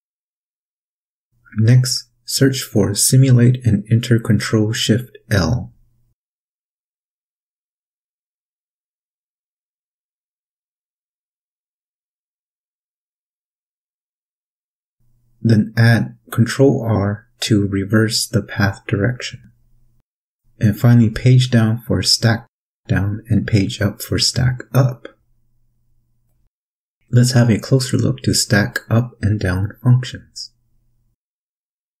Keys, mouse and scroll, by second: 0.4 click, 1.4-2.9 typing, 4.6 click, 5.3 click, 5.7 click, 8.0 ctrl+shift+l, 9.5-10.0 drag, 10.1-11.4 typing, 12.4 click, 13.9 click, 14.6 click, 15.9 ctrl+r, 17.4-18.0 drag, 18.0-19.4 typing, 20.5 click, 21.2 click, 22.1 Page_Down, 23.2 click, 26.1 Page_Up, 27.7 click, 30.2 click.